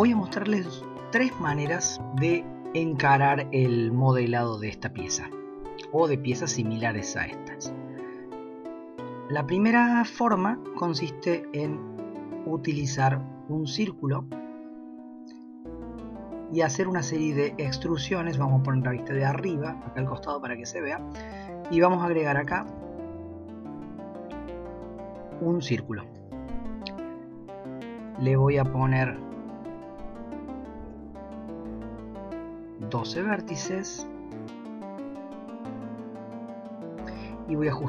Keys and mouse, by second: 15.2-16.8 drag, 20.2 shift+middle click, 28.1-34.7 drag, 37.7-37.8 drag.